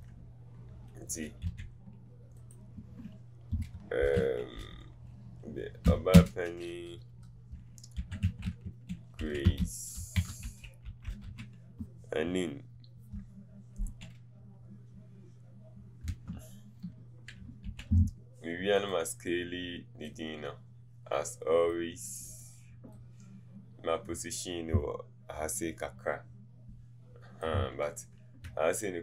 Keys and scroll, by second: 9.9-11.2 typing, 16.1 Return.